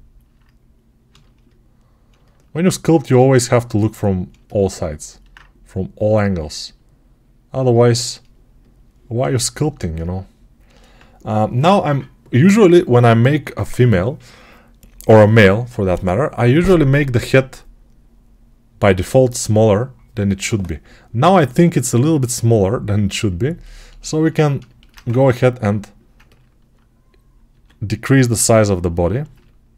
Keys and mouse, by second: 8.0-24.1 alt+drag, 24.1-28.7 ctrl+alt+right drag, 24.9 ctrl+Tab, 27.6 s, 28.7-29.7 alt+middle drag.